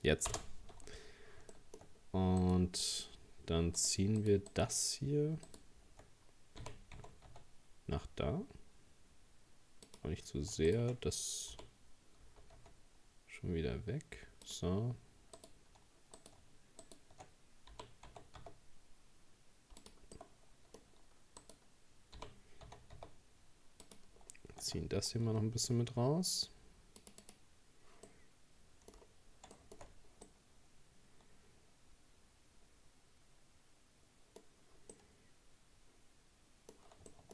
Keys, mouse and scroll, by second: 1.0-1.5 scroll up 2, 1.5 shift+middle click, 2.4 right click, 3.8 shift+right click, 4.2 shift+right click, 4.5 shift+right click, 5.5 shift+right click, 6.6 g, 10.7 shift+right click, 11.5 g, 15.4 right click, 16.2 right click, 16.8 shift+right click, 17.7 g, 20.2-21.4 middle drag, 21.4 right click, 22.2 g, 24.2-24.6 scroll down 2, 25.2 Tab, 27.0-28.1 drag, 28.1 middle click, 29.0-29.6 scroll down 2, 29.6 shift+middle click, 29.9-30.3 scroll up 1, 30.3-33.3 middle drag, 34.9-37.3 middle drag.